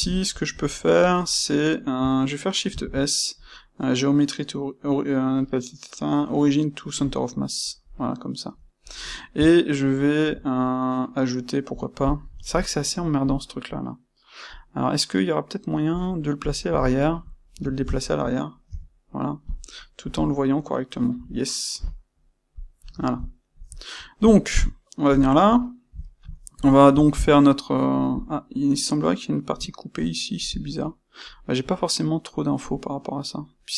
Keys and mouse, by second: 2.7 shift+s, 7.9-15.9 middle drag, 15.9 click, 15.9-16.3 middle drag, 16.3 click, 16.4-33.7 middle drag, 19.4 click, 22.5 click.